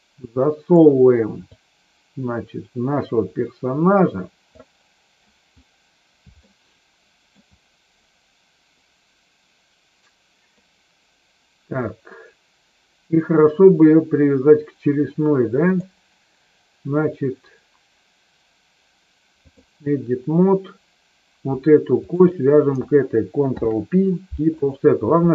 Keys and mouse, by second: 1.5-4.6 drag, 6.3-7.3 shift+middle drag, 15.7-19.7 drag, 22.0 shift+click, 23.5 ctrl+p.